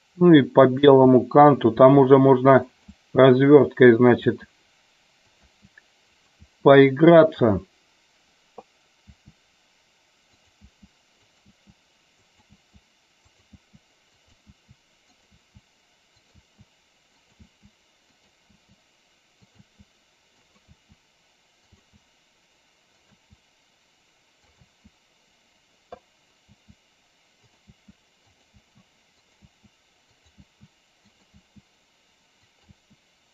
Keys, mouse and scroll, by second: 0.7 click, 0.9 e, 1.5 click, 1.9 e, 2.6 click, 3.0 e, 4.1 click, 4.3 e, 5.4 click, 5.5 e, 6.2 click, 6.5 e, 7.2 click, 7.5 e, 9.1 e, 10.4 click, 10.6 e, 11.2 click, 11.5 e, 12.4 click, 12.6 e, 13.4 click, 13.6 e, 14.3 click, 14.5 e, 15.1 click, 15.4 e, 16.1 click, 16.5 e, 17.4 e, 18.1 click, 18.6 e, 19.6 e, 20.4 click, 20.9 e, 21.6 click, 21.8 e, 23.1 click, 23.3 e, 24.5 click, 24.6 e, 26.7 e, 27.5 click, 27.8-31.4 typing, 28.4 click, 29.3 click, 30.1 click, 31.1 click, 32.5 click, 32.9 e.